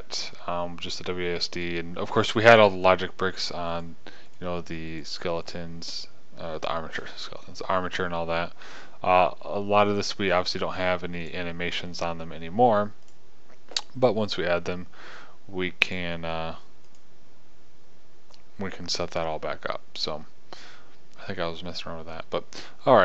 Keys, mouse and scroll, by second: 4.2-5.4 right drag, 16.4-20.5 drag.